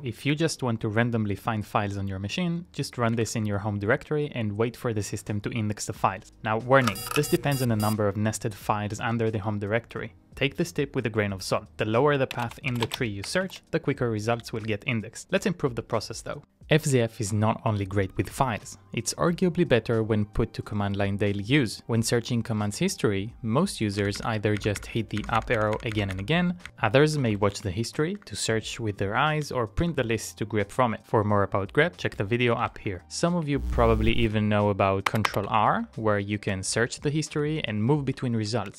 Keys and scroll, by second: 0.0 Down, 12.0-13.1 typing, 26.9-30.5 typing, 28.3 Return, 32.5-33.2 typing.